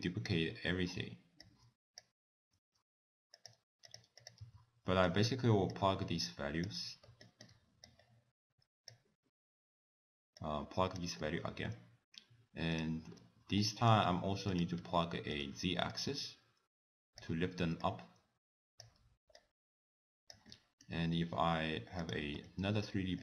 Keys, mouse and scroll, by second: 1.5 click, 2.6 shift+d, 3.9 click, 4.2 click, 4.5 x, 5.1 shift+right click, 5.7 click, 7.2 shift+right click, 7.9 click, 10.4 click, 11.2 middle click, 11.5-12.0 scroll up 1, 12.8 click, 13.6 middle click, 14.5 click, 14.8 shift+d, 16.0 click, 17.8 click, 19.4 click, 20.5 middle click, 21.2 scroll down 1, 22.0 click, 22.5 shift+d.